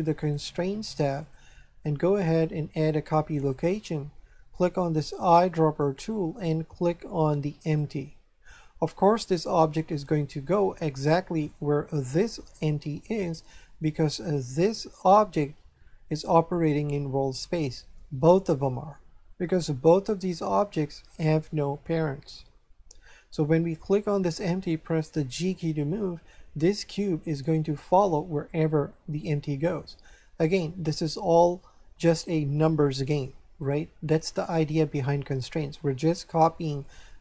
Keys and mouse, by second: 0.2 click, 3.3 click, 5.2 click, 7.6 click, 12.1 right click, 14.6 right click, 23.9 right click, 25.3 g, 33.6 right click.